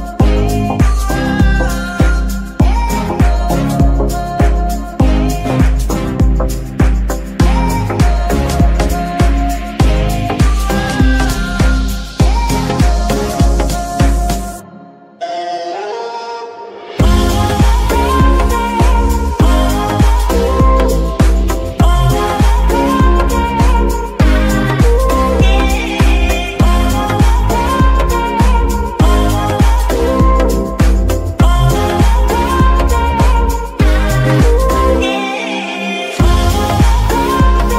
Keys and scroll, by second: 1.9 g, 5.0 g, 8.1 g, 21.0 g, 21.7 Escape, 24.4 g, 25.0 Escape.